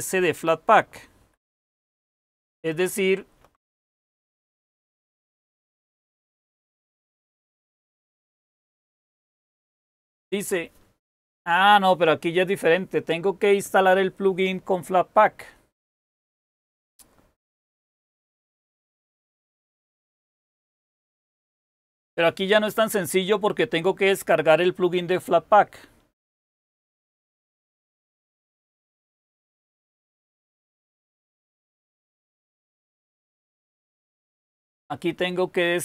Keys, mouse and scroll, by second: 1.1 super+k, 2.2 super+k.